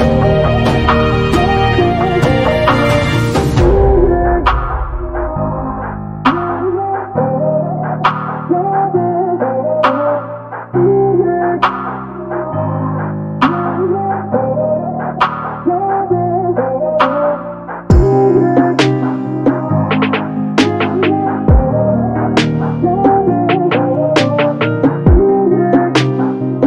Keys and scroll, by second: 4.8 b, 15.8 space, 23.2 space.